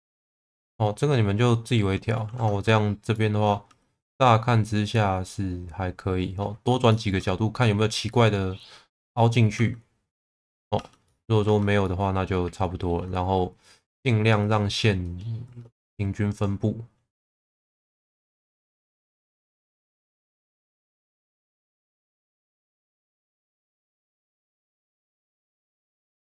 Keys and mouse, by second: 2.3 ctrl+s, 3.1 middle click, 3.7 Tab, 4.2-6.4 middle drag, 6.9 shift+middle click, 8.1-9.4 middle drag, 9.6 Tab, 10.8 Tab, 11.1 middle click, 11.5 Tab, 11.8-12.9 middle drag, 15.5 shift+v, 16.3 click, 17.9 click, 18.2 shift+v, 18.8 click, 20.6 click, 22.0 click, 22.5 middle click, 23.5 Tab, 23.9-25.8 middle drag, 26.1 Tab.